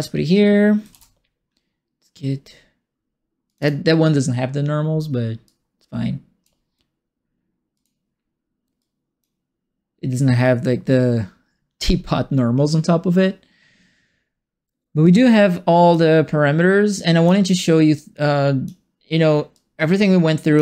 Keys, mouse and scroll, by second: 0.9 ctrl+space, 3.4 click, 3.6 click, 5.4 click, 7.7 click, 8.7 click, 10.4-11.7 drag, 15.0 click, 16.9 click, 17.9 click, 19.5-20.5 drag.